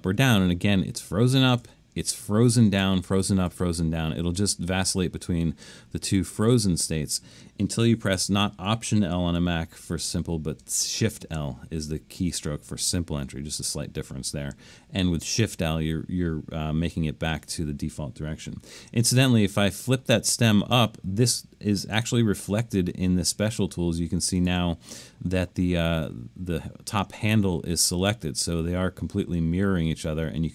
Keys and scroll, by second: 1.6 i, 2.8-3.5 typing, 4.9 typing, 6.5 |, 11.1 shift+l, 19.2 i.